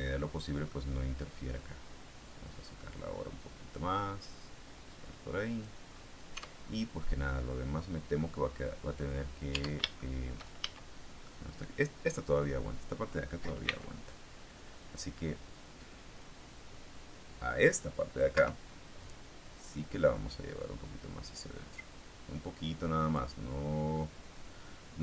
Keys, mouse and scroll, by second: 1.5-5.8 drag, 6.2 Tab, 6.4-6.9 scroll down 1, 6.9 middle click, 7.8 scroll up 1, 8.1 middle click, 9.4 Tab, 9.9 shift+middle click, 10.5 shift+a, 11.2-12.2 middle drag, 12.2-13.4 scroll up 1, 13.6 c, 14.1-18.3 drag, 18.2 Escape, 19.0-23.2 drag, 23.2-23.8 scroll down 2, 23.8-25.0 middle drag.